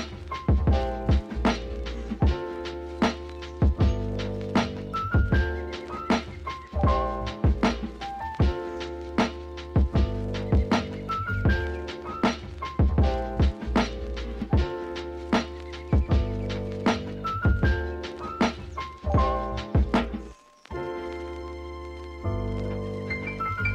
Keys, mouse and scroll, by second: 0.2 s, 2.2 Tab, 2.7 click, 3.0 scroll down 1, 3.1 Tab, 3.4 shift+middle click, 3.6 scroll up 1, 3.8 ctrl+r, 6.3 Tab, 6.5 scroll down 2, 6.7 drag, 7.4 ctrl+s, 7.6-9.0 shift+middle drag, 9.0-9.4 scroll up 2, 9.4-9.8 shift+middle drag, 9.8 shift+right click, 9.9 shift+a, 12.8 r, 13.8 r, 15.0 s, 16.4 scroll up 1, 16.5 Tab, 16.8-19.4 typing, 19.1 Tab, 20.9 g, 22.6 s, 23.2 g.